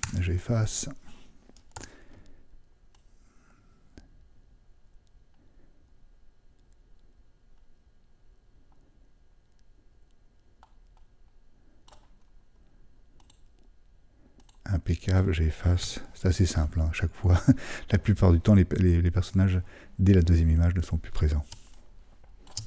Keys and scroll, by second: 1.7 super+d.